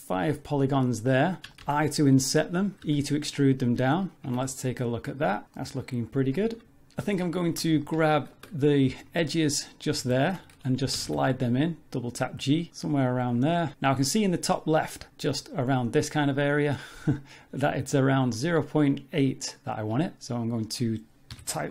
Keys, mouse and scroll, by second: 0.4 scroll up 1, 0.8 middle click, 1.2 scroll up 2, 1.5 shift+middle click, 1.6 i, 2.9 e, 4.3 Tab, 4.5-5.1 scroll down 6, 5.1 middle click, 5.5 middle click, 6.0-6.4 scroll up 4, 6.4 Tab, 7.0 z, 7.4 shift+middle click, 7.8 ctrl+middle click, 8.8 2, 9.1 click, 9.5 middle click, 10.1 shift+middle click, 10.9 g, 20.4 click.